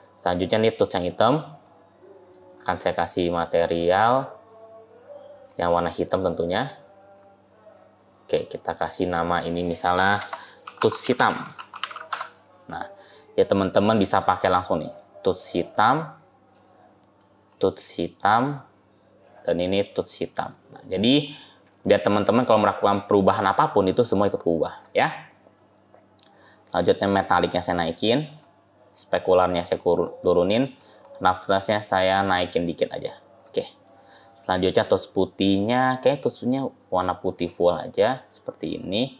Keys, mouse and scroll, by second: 0.7 click, 4.3 click, 5.3 click, 8.7 click, 8.9 click, 9.2 click, 9.4 click, 13.6 click, 14.8 click, 17.3 click, 19.1 click, 22.3 click, 26.6 click, 28.8 click, 33.7 middle click, 34.6 click, 35.0 middle click, 36.3 click.